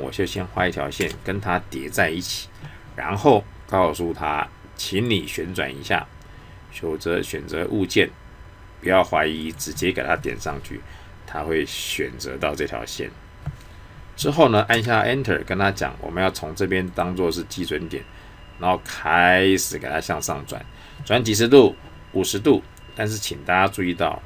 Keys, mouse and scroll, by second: 0.2 click, 4.9 click, 9.4 click, 16.9 click.